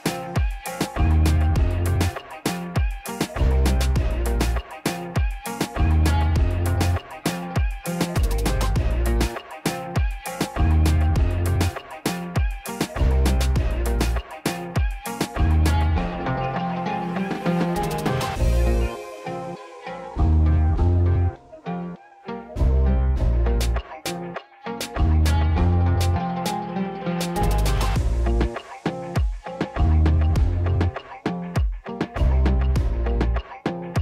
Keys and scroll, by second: 0.2 x, 0.9 shift+a, 1.6 t, 16.6 Tab, 20.3 shift+a, 21.1 Tab, 21.5 shift+a, 27.7 shift+z, 29.5 g, 31.7 shift+z.